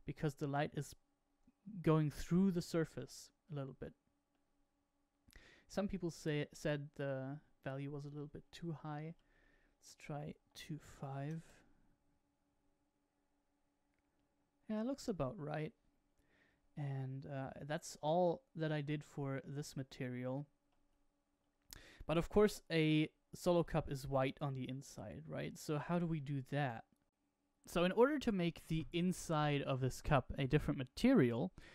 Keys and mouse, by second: 3.0-4.5 middle drag, 5.4 middle click, 7.2-15.4 drag, 9.9 Right, 16.5-18.4 middle drag, 23.2 shift+middle click, 24.1-26.4 middle drag, 30.3-31.7 middle drag.